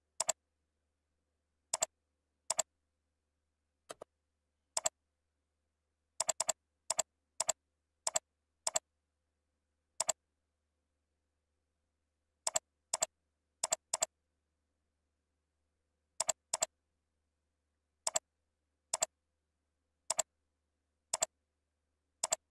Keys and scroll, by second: 0.8 ctrl+v, 3.0 ctrl+a, 10.9 ctrl+shift+., 14.9 ctrl+shift+., 15.8 ctrl+b, 17.3 ctrl+shift+,, 21.5 ctrl+a, 21.7 ctrl+e.